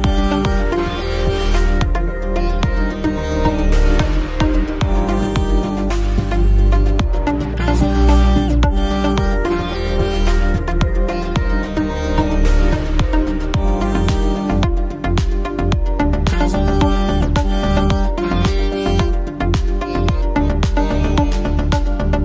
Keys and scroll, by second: 1.4 ctrl+a, 1.9 ctrl+t, 3.7 ctrl+t, 11.7 shift+space.